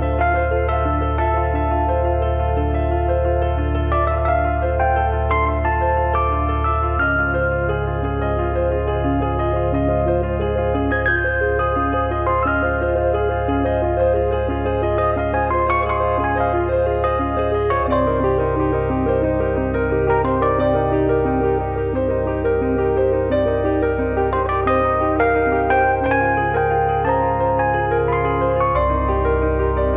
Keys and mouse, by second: 0.3 click, 1.2 click, 2.1 click, 2.6 click, 3.0 click, 4.4 click, 5.5 click, 6.4 click, 7.8 click, 8.6 click, 10.1 click, 11.3 r, 12.9 click, 15.2 z, 15.9 click, 16.5 click, 17.5 click, 18.3 z, 18.8 click, 20.4 click, 22.4 click, 23.5 click, 24.6 click, 25.4 click, 27.8 click, 28.9 click.